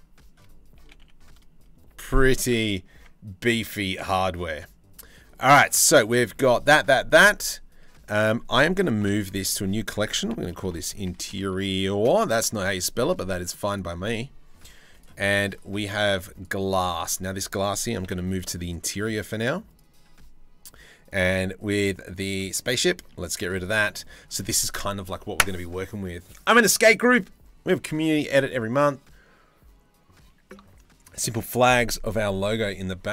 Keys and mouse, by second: 0.4 g, 2.6 Tab, 3.3 click, 4.0-5.9 drag, 8.6 m, 15.9 click, 17.6 m, 22.1 click, 22.7-23.4 middle drag.